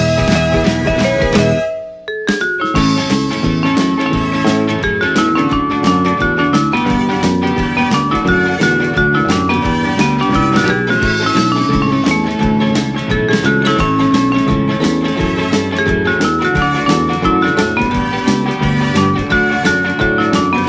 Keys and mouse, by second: 0.3 click, 3.1 click, 5.0 s, 8.8 click, 9.0 Tab, 10.1 click, 10.9 g, 11.2 z, 14.4 click, 14.8 a, 15.1 s, 16.6 right click, 16.9 Tab, 17.5 middle click, 17.6 s, 18.8 click, 19.0 Tab, 20.4 middle click.